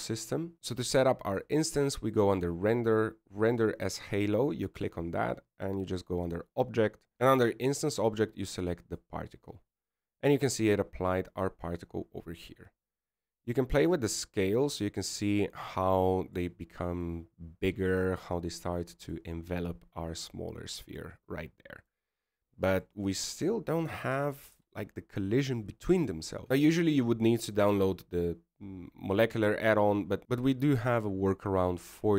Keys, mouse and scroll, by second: 0.6 click, 0.6 scroll down 7, 13.2 scroll down 2, 15.0 click, 19.1 middle click, 22.2 middle click, 24.9 middle click.